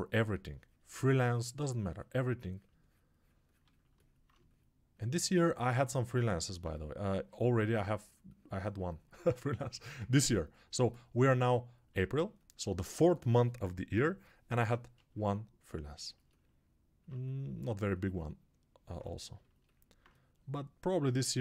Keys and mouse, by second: 9.6 alt+shift+right click, 10.0-11.2 ctrl+alt+drag, 11.2 right click, 11.2 shift+click, 11.8-15.0 right drag, 15.0-21.4 shift+drag.